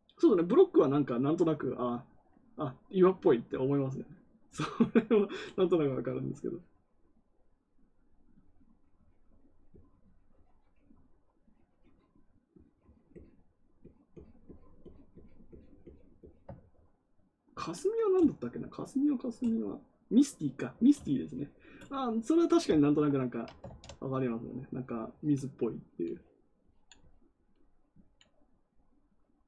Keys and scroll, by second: 23.6 ctrl+z.